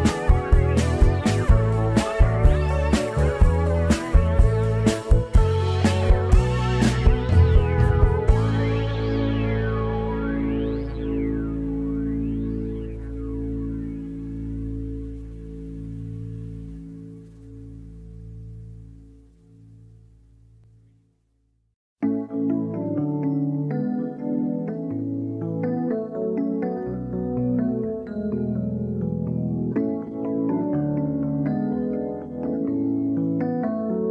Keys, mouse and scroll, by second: 2.0 scroll down 2, 2.2 middle click, 2.6 z, 3.0 scroll down 1, 3.1 middle click, 4.0 scroll up 3, 4.3 middle click, 5.3 click, 5.7 scroll down 3, 5.8 middle click, 6.6 click, 7.2 z, 7.8 middle click, 8.7 z, 9.2 click, 9.5-9.9 scroll up 3, 9.9 shift+middle click, 10.2 scroll up 1, 10.8 scroll down 1, 10.8 shift+middle click, 11.3-11.8 scroll down 1, 11.8 click, 12.1 scroll down 4, 12.3-13.4 middle drag, 13.4 click, 13.8 middle click, 13.9-14.4 scroll down 4, 14.1 Tab, 14.4-15.9 scroll up 5, 14.5-14.9 middle drag, 15.0 middle click, 15.9-16.6 right drag, 16.6 scroll down 4, 16.7-17.9 middle drag, 17.9 scroll up 1, 18.0 Tab, 18.1 scroll down 1, 18.5 middle click, 18.9 3, 19.6 scroll down 1, 19.7-20.4 scroll up 5, 20.4 alt+a, 20.5-21.4 middle drag, 21.4 Tab, 21.7 middle click, 21.9 scroll up 4, 22.2 scroll down 2, 22.3 KP_1, 23.0 n, 24.2 n, 25.9-26.8 drag, 26.8-27.2 shift+middle drag, 27.2 Tab, 27.6 3, 28.1 z, 28.5 click, 29.6 shift+d, 30.3 r, 32.9 click, 33.3 click, 34.0 ctrl+shift+Tab.